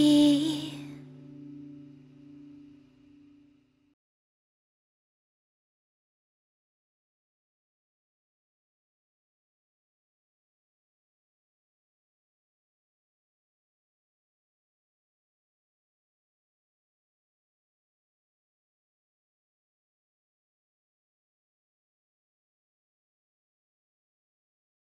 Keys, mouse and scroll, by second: 1.9-2.6 typing, 11.8 ctrl+d, 13.1-14.4 typing.